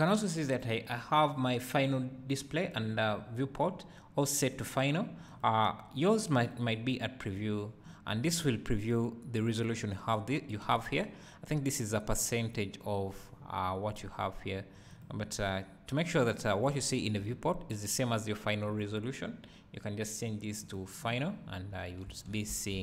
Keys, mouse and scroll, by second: 7.4-22.8 drag, 16.7 `, 21.4 scroll down 1.